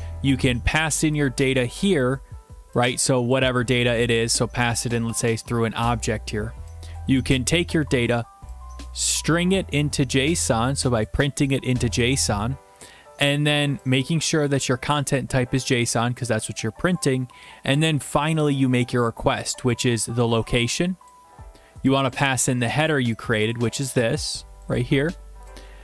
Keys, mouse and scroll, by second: 1.3 click, 3.3 click, 4.9 click, 5.4 click, 7.3 click, 7.7-8.3 scroll, 10.4 click, 13.0 scroll, 14.9 click, 19.3 click, 21.0 click, 22.9 click, 23.4 click, 23.5 click, 24.7 click.